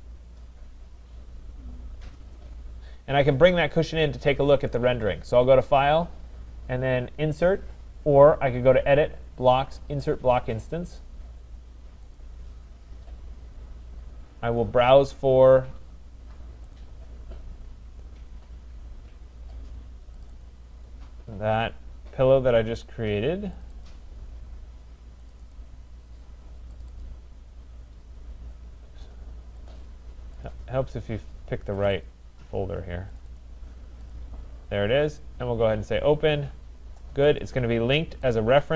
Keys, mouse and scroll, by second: 4.4-9.6 drag, 12.2-14.6 drag, 16.7 click, 20.4 click, 23.6 click, 23.8 click, 25.3 click, 25.5 click, 26.8 click, 27.0 click, 29.7 click, 30.5 click, 31.9 click, 32.1 click, 33.2 click, 33.4 click, 34.1 click, 35.2 click, 37.4 click, 38.3 click.